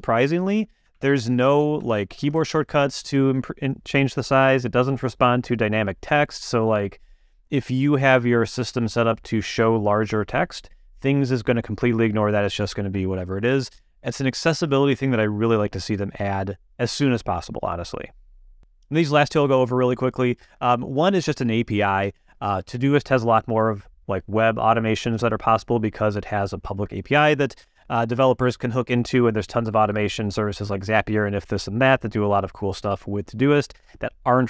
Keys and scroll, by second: 0.7 super+=, 0.8 super+BackSpace, 0.9 super+=, 1.8 super+-.